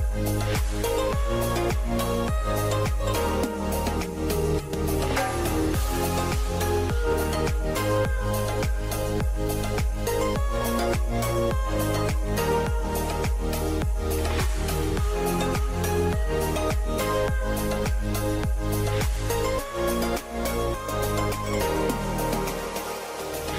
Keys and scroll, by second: 1.7 shift+Left, 1.8 shift+Left, 1.8 shift+Left, 2.0 shift+Left, 2.2-4.6 typing, 7.5 BackSpace, 7.8 BackSpace, 16.3 a, 17.9-18.8 typing, 22.6-23.5 typing.